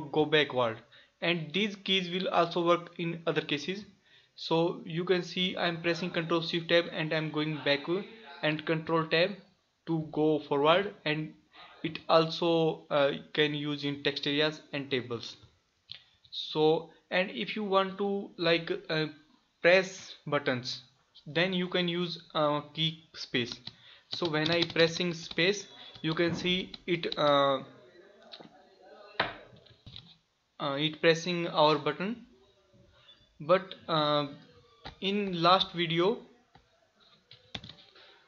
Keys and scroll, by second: 5.6 ctrl+shift+Tab, 8.9 ctrl+Tab, 15.8 ctrl+shift+Tab.